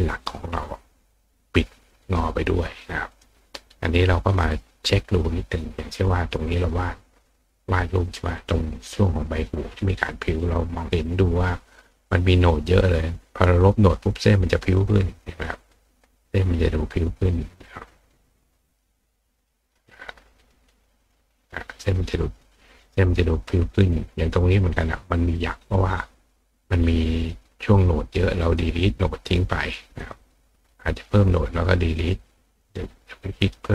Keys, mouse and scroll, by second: 0.8 click, 2.0 click, 3.1 click, 4.4 click, 5.2-6.6 drag, 8.4 click, 9.1 click, 11.5 click, 11.8 click, 13.1 click, 13.4 click, 13.8 click, 14.8-15.4 drag, 15.8 click, 16.7 click, 18.2-18.8 drag, 20.4 click, 20.6 click, 21.0 click, 21.7 click, 23.9 click, 27.0 click, 27.3 click, 27.7 click, 28.6 click, 30.0 click, 30.2 click, 30.9 click, 31.5 click, 31.9 click, 32.6 click, 33.3 click.